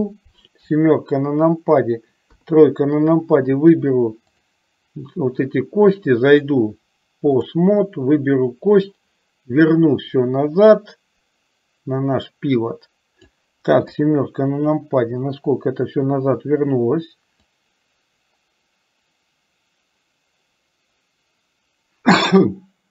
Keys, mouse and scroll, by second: 0.6 KP_7, 2.4 KP_3, 4.5 click, 6.5-7.7 drag, 9.0-13.3 drag, 14.0 KP_7, 17.5 click, 18.6-22.9 drag.